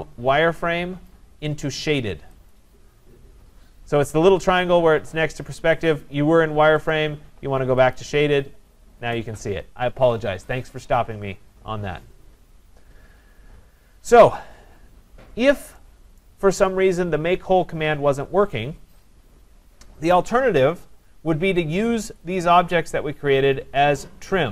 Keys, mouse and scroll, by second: 2.5 click, 6.0 click, 6.9 click, 7.9 click, 12.7-13.5 scroll, 13.6 scroll down 3, 14.6-15.2 scroll up 1, 15.2-16.2 scroll up 3, 16.2 right click, 20.4 middle click, 22.2 click.